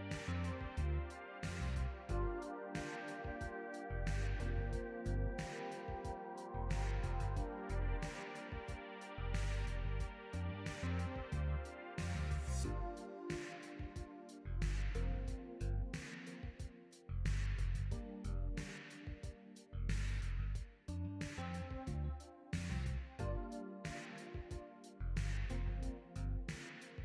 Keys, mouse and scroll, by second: 1.1 click, 9.6 click.